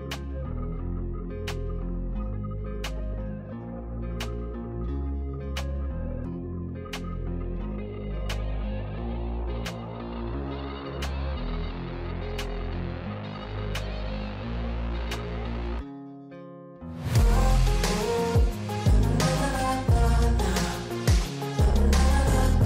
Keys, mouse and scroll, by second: 1.3-1.8 scroll up 1, 1.8-3.2 shift+middle drag, 3.2-3.6 scroll up 1, 3.6-4.8 scroll down 1, 4.8 scroll down 1, 5.0-6.1 drag, 6.1-10.0 middle drag, 14.1 click, 16.1-19.2 drag.